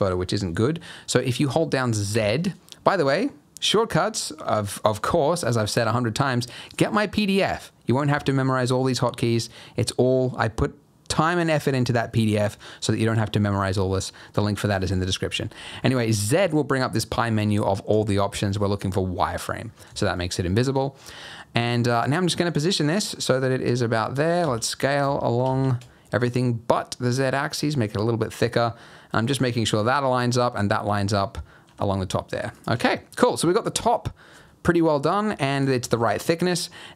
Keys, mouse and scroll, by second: 2.1 z, 19.6 scroll up 2, 20.0 shift+middle click, 21.0 g, 22.5 g, 24.4 s, 31.6 g, 35.6 scroll down 3, 35.9 shift+middle click, 36.2-36.9 scroll up 2.